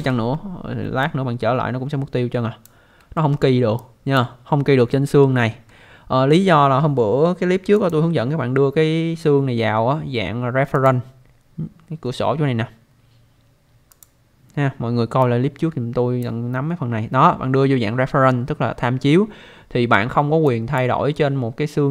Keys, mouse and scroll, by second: 1.0 click, 3.2 alt+middle click, 3.8 alt+click, 4.5-4.8 scroll up 1, 4.9 alt+middle click, 7.7 click, 10.8 click, 13.9 click, 20.5 click.